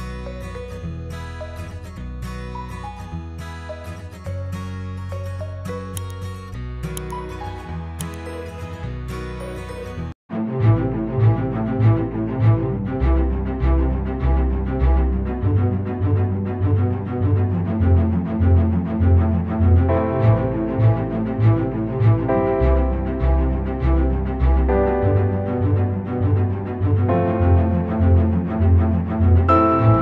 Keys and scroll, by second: 4.8 ctrl+-, 6.6 space.